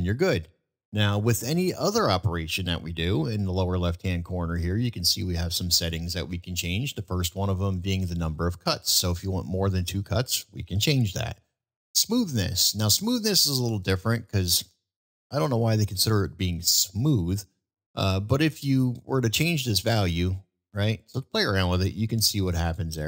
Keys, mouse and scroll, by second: 1.8 middle click, 9.6 click, 9.9 click, 18.9-23.0 drag.